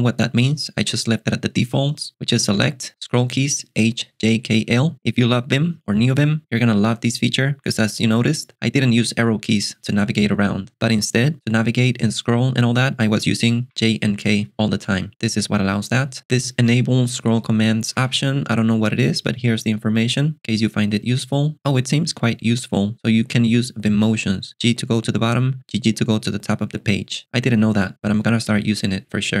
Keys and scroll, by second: 2.6 Escape, 16.7 alt+super+BackSpace, 17.7-18.6 typing.